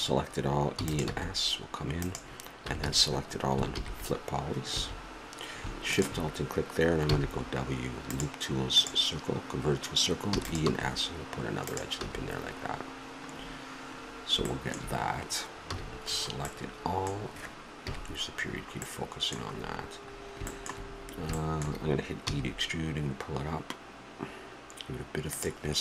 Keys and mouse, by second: 0.7 e, 2.6 a, 2.8 a, 3.7 ctrl+n, 4.7 a, 5.9-7.8 drag, 7.1 w, 10.3 e, 12.0 a, 12.8-16.0 middle drag, 15.6 a, 17.8 KP_Decimal, 22.3 e.